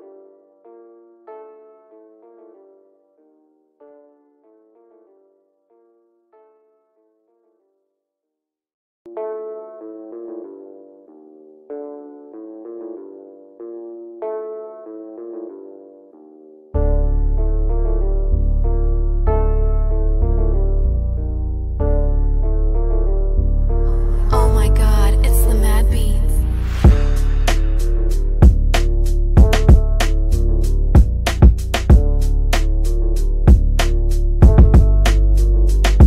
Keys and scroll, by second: 18.3 b, 23.0 Escape, 34.5 Delete.